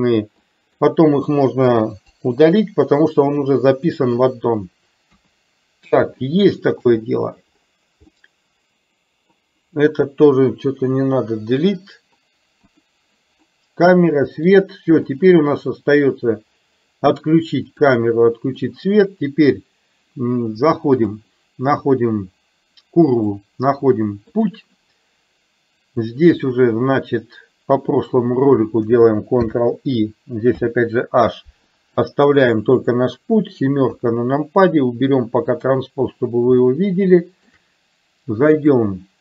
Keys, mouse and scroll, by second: 0.5 click, 2.2 Delete, 2.2 BackSpace, 5.3 KP_1, 6.2-6.8 shift+middle drag, 8.2-8.9 middle drag, 11.0 Delete, 12.8 click, 13.6 middle click, 15.1 click, 17.8 click, 21.1-24.6 drag, 29.5 ctrl+i, 30.6 h, 32.1 drag, 33.9 KP_7, 35.6 click, 36.6 shift+middle click, 38.6-39.2 drag.